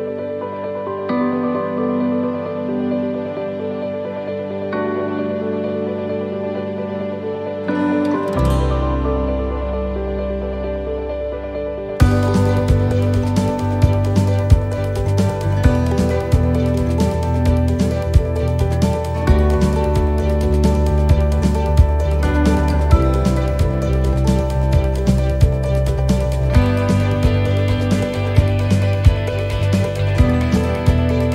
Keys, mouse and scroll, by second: 0.1 click, 4.8 middle click, 5.4-6.4 scroll up 1, 6.4 middle click, 6.4 scroll up 1, 7.5 right click, 9.3 click, 14.3 middle click, 15.0 scroll up 1, 15.7 scroll up 1, 15.9 shift+middle click, 16.9 right click, 17.8 l, 18.8 l, 20.7 middle click, 24.8 click.